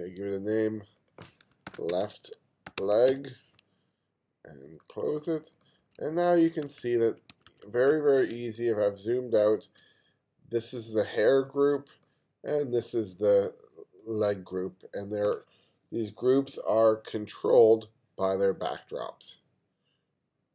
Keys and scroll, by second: 1.7 shift+l, 1.9 space, 2.7 e, 3.1 g, 5.8 1, 6.7 2, 7.3 1, 8.4 space.